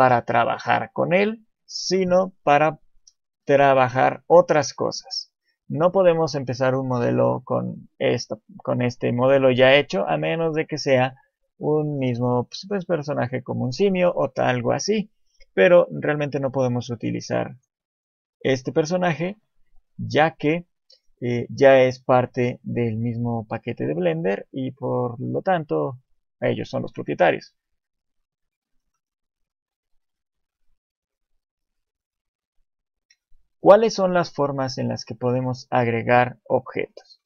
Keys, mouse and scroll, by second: 0.1 scroll up 2, 2.6 shift+middle click, 3.6 shift+middle click, 4.3-4.8 scroll down 1, 4.8 shift+middle click, 9.4 shift+middle click, 10.5 scroll up 1, 17.0 click, 17.5 right click, 18.0 click, 19.7 shift+c, 20.2 scroll up 3, 20.6 shift+middle click, 21.1 scroll up 1, 21.7 click, 22.7 click, 23.8 click, 24.3 click, 24.8 scroll down 2, 25.2 shift+middle click, 25.7 click, 26.8 shift+middle click, 27.7 shift+middle click, 29.7 shift+middle click, 33.8 click, 34.4-34.8 scroll down 1, 34.8 shift+middle click.